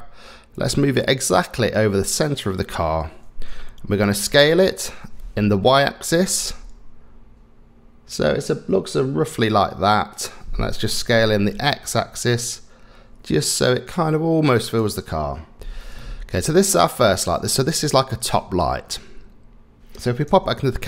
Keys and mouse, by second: 4.3 s, 11.0 s, 15.6 s, 16.0-19.8 middle drag, 20.3 KP_0.